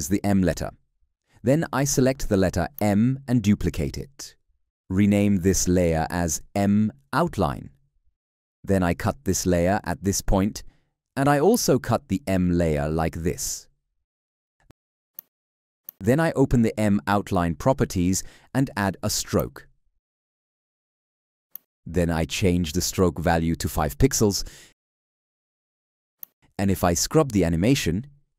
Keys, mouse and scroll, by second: 3.7 ctrl+d, 9.3 alt+], 12.4 alt+[.